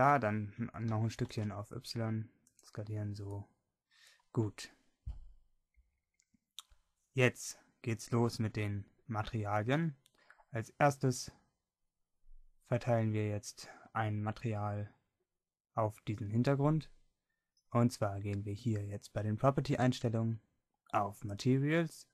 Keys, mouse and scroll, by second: 1.0-2.4 drag, 1.0 s, 3.0 click, 4.4-8.4 drag, 19.8-22.1 drag.